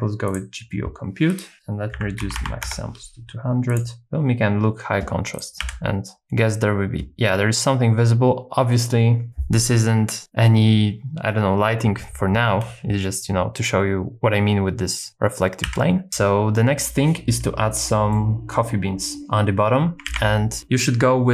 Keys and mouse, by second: 1.3-2.7 drag, 2.4 KP_0, 3.7 click, 5.6 z, 15.6 z, 18.1 middle click, 20.1 super+s.